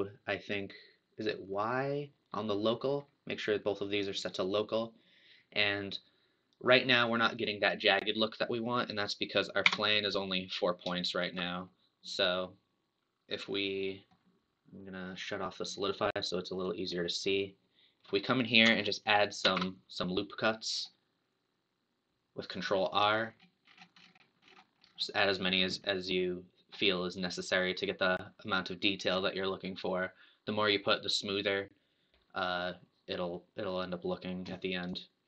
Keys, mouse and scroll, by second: 4.3-7.3 middle drag, 8.7 click, 9.7 Tab, 10.9-14.7 shift+middle drag, 15.1-15.5 scroll down 4, 16.7 click, 17.3-19.4 middle drag, 19.4 ctrl+r.